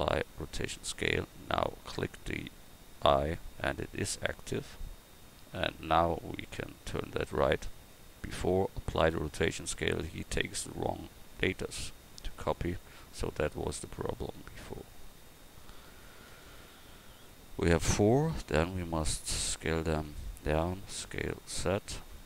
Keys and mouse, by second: 18.3 s, 20.6 s.